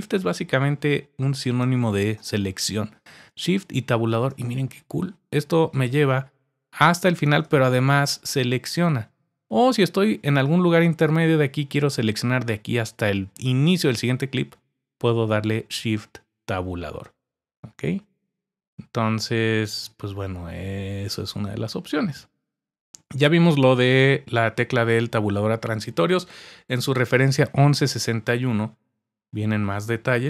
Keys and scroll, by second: 3.9 shift+Tab, 7.2 shift+Tab, 15.2 shift+Tab.